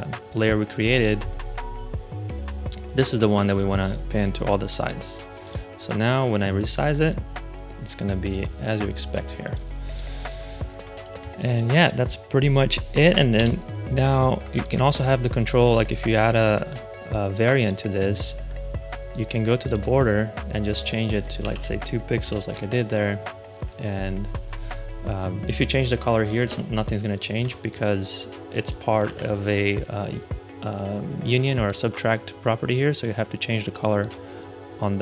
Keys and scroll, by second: 11.0 space, 13.2 BackSpace, 21.3 2, 22.1 Return, 26.3 ctrl+c, 27.3 ⟲, 29.0 super+z.